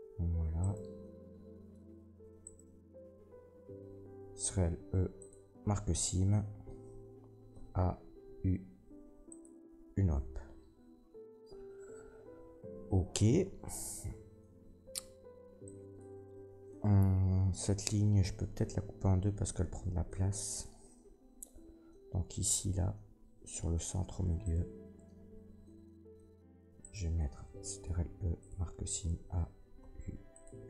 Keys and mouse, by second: 0.5 alt+shift+right click, 2.4 alt+shift+middle click, 2.5-27.7 alt+shift+drag, 4.4 ctrl+e, 7.5 a, 8.2 u, 24.4 middle click, 24.4 right click, 26.8 middle click, 26.8 right click, 28.5 ctrl+e, 28.5-30.6 drag, 28.9 a, 29.8 u.